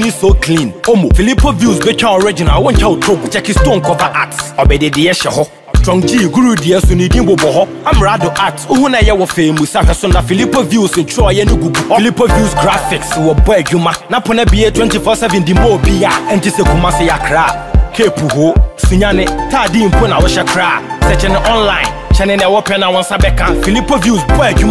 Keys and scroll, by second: 1.7 ctrl+a, 14.2 ctrl+a.